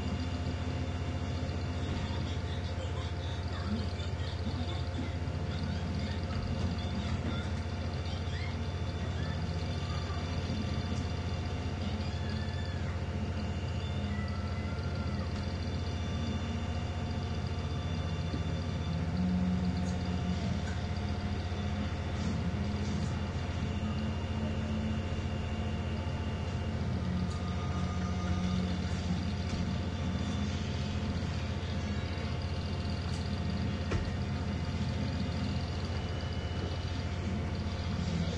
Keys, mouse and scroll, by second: 0.1-2.1 drag, 2.2-2.6 ctrl+scroll down 1, 3.8-6.5 drag, 7.2 ctrl+shift+g, 7.6 ctrl+shift+click, 8.5-10.0 drag, 11.5 End, 15.4 Delete, 16.2 click, 17.5 click, 18.9 click, 19.7-22.5 drag, 24.4 click, 26.1 click, 27.0 click, 28.3 1, 29.5 Return, 32.0 click, 33.1 2, 34.0 Return, 34.9-36.6 drag, 36.4 ctrl+z, 37.5-38.3 drag.